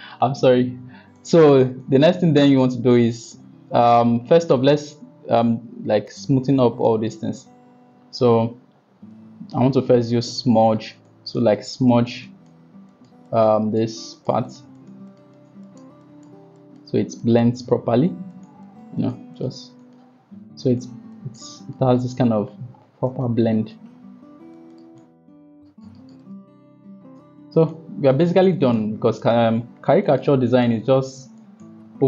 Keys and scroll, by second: 10.3 [, 10.5 [, 10.6 [, 10.8 [.